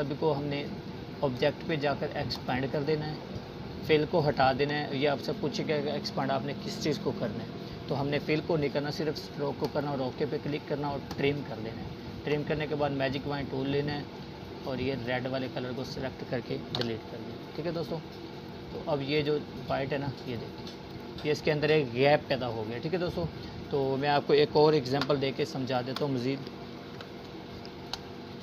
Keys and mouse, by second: 5.0 click, 12.1 Delete, 13.1-20.7 drag, 14.4-14.7 click, 20.7 space, 21.1 click, 21.2 space, 22.6 space, 22.9 click, 23.1 space, 24.1-24.8 drag, 28.3-28.4 alt+shift+drag.